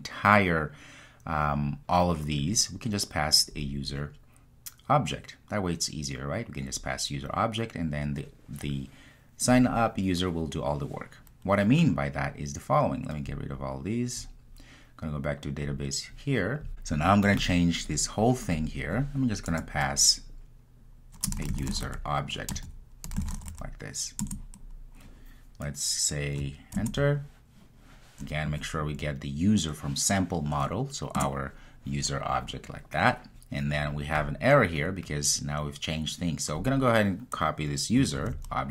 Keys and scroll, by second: 24.3 Return, 26.8 alt+Return, 38.2 super+c.